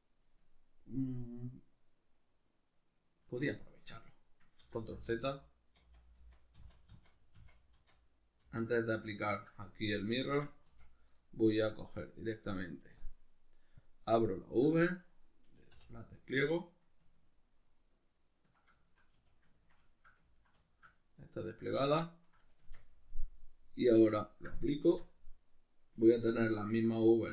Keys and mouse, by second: 4.6 ctrl+z, 10.3 Tab, 10.7 a, 11.8-17.1 drag, 15.8 u, 17.1-24.3 ctrl+middle drag, 19.1 a, 22.6 Tab, 24.3-25.5 drag, 24.8 Tab, 25.5 right click, 26.1-27.2 ctrl+middle drag, 27.2 right click.